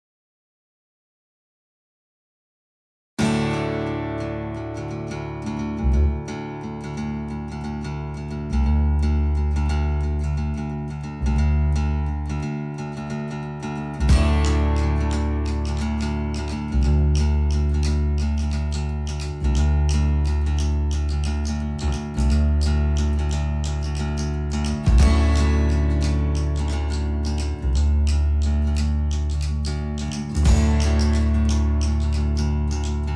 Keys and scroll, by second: 3.0 space, 4.9 t, 6.5 d, 8.5 t, 10.1 d, 22.0 Escape, 25.5 Escape, 28.8 Escape.